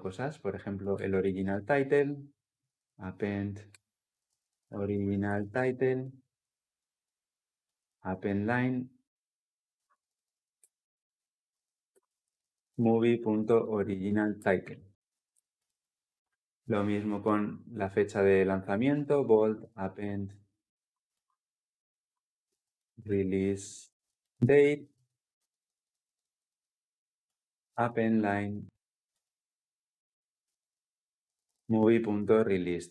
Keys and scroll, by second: 1.8 Return, 10.4 Return, 11.7 Return, 20.9 Return, 25.9 ctrl+alt+l, 26.1 ctrl+alt+o, 28.9 Return.